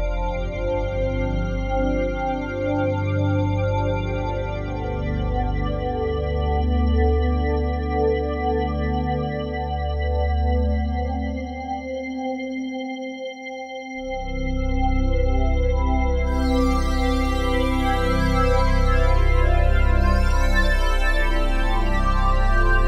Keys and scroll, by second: 2.8 F3, 13.3 F3, 13.8 F4.